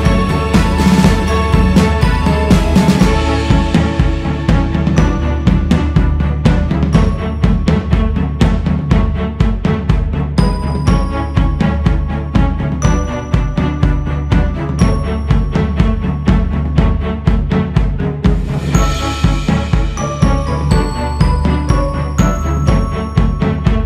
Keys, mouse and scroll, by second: 0.0-1.2 drag, 1.2 ctrl+z, 2.1 shift+c, 4.0-7.0 drag, 7.0 shift+s, 7.7-9.8 drag, 9.8-10.1 scroll down 4, 12.7 click, 13.3-14.4 scroll up 5, 14.4 shift+c, 15.8-18.6 drag, 18.6-20.5 scroll down 9, 20.5-21.5 scroll up 4, 21.8-22.8 scroll up 2, 23.5 g.